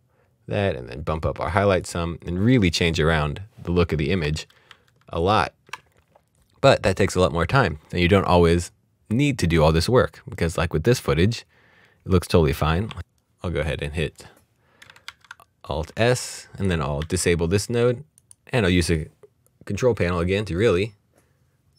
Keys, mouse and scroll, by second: 1.8 click, 4.2 click, 4.3 ctrl+d, 4.7 ctrl+d, 11.8 click, 15.2 s, 16.5 click, 17.0 ctrl+d, 18.2 click.